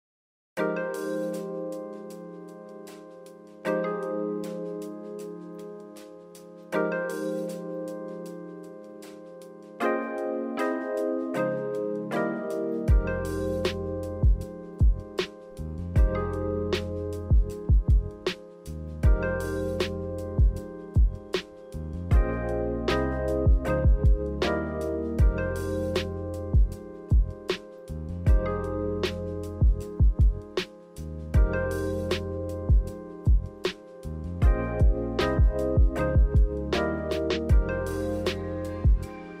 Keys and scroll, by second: 16.4 g, 19.4 z, 22.0 2, 23.8-24.7 typing, 26.5 7, 36.6 v.